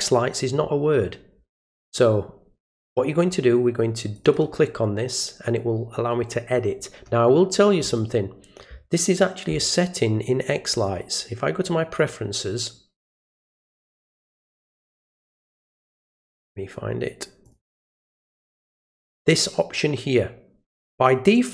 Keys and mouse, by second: 4.1 click, 4.3 click, 7.8 click, 10.7 click, 12.0 click, 14.5 click, 17.4 click, 20.9 click.